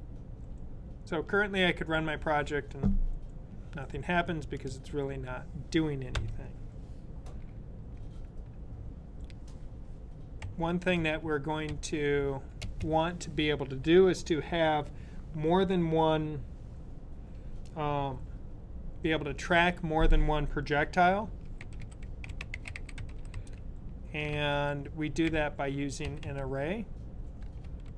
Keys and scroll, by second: 10.1 typing, 12.4-13.1 typing, 21.1-26.1 typing.